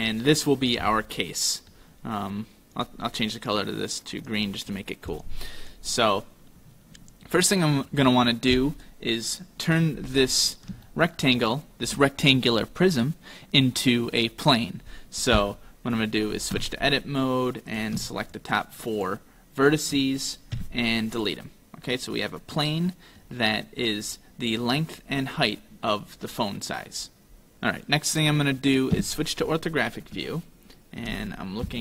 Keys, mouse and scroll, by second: 0.1 right click, 0.9 middle click, 2.8 click, 4.7 click, 5.1 right click, 5.6 right click, 6.2 middle click, 10.9 shift+middle click, 16.6 Tab, 17.7 right click, 18.3 shift+right click, 19.0 shift+right click, 19.6 shift+right click, 20.6 x, 22.0 middle click, 27.5 KP_5, 29.0 KP_5, 30.4 shift+middle click, 31.7 KP_7.